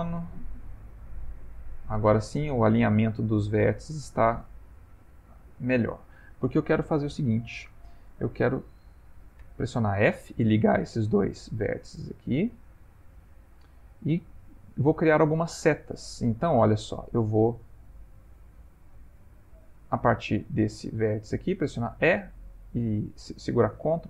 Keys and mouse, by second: 14.4 click, 21.7 e.